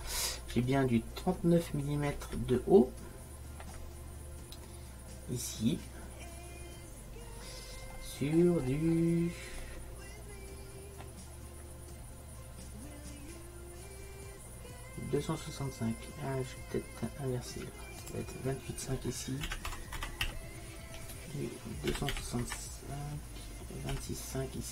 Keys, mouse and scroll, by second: 2.6 middle click, 3.0 middle click, 3.2 middle click, 3.4 middle click, 4.6-7.2 middle drag, 18.1-20.0 drag.